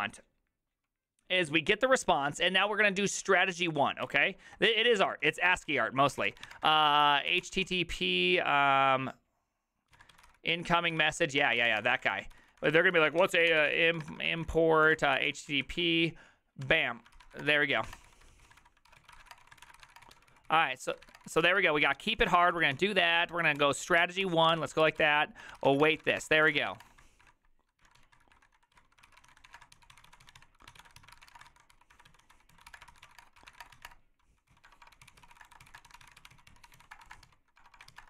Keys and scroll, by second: 3.8-8.2 typing, 9.7-38.0 typing, 24.2 ctrl+c.